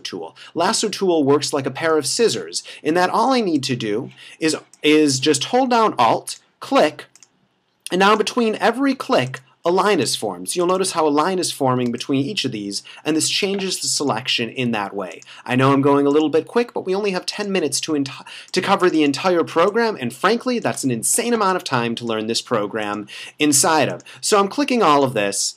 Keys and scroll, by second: 2.0 space, 11.9 space, 19.6 space.